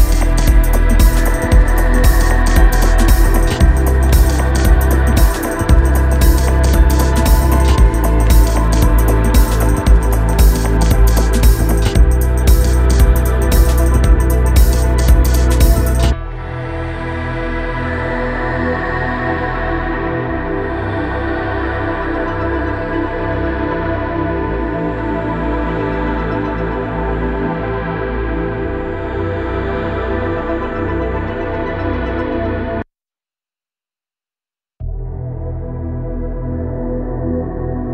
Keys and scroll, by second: 13.4 Tab.